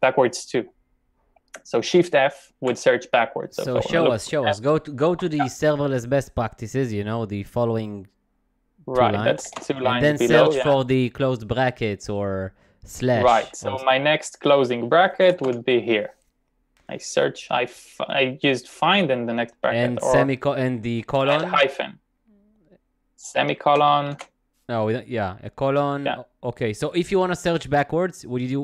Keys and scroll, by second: 2.7 shift+f, 5.2 l, 9.5 typing, 15.1-16.0 typing, 22.5-24.2 typing, 25.4-25.8 typing.